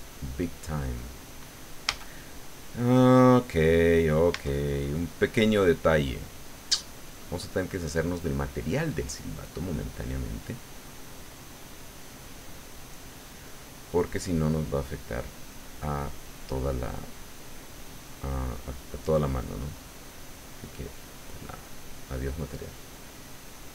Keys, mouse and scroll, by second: 1.8 a, 4.3 Tab, 21.3 click.